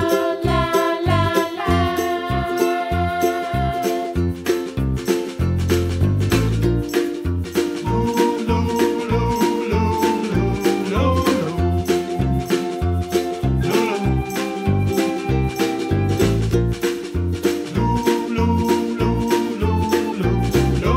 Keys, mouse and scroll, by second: 1.4 click, 1.7 click, 1.8 click, 2.3 alt+shift+click, 2.4 alt+shift+click, 2.7 alt+shift+click, 3.3 s, 4.4 click, 5.0 alt+shift+click, 5.5 alt+shift+click, 6.0 s, 7.4 click, 7.5 click, 8.3 alt+shift+click, 8.4 alt+shift+click, 8.7 alt+shift+click, 9.1 s, 10.8 middle click, 11.5 click, 11.9-13.7 scroll up 2, 13.7 g, 15.6 s, 17.1 click, 17.9 alt+click, 18.5 alt+shift+click, 19.0 s.